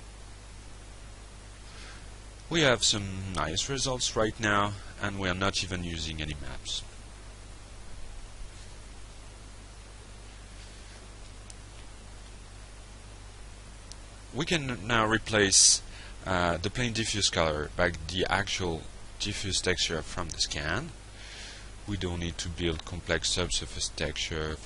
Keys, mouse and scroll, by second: 11.8 click, 14.9 alt+Tab, 21.9 click, 23.9 click.